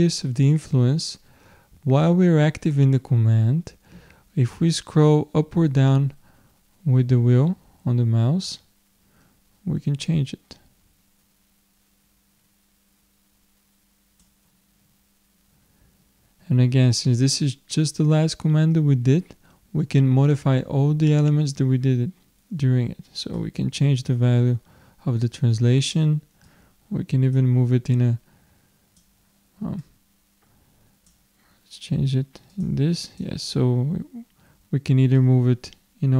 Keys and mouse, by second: 23.4-25.1 drag, 26.4-29.7 drag, 32.5-34.9 drag, 35.2-36.1 drag.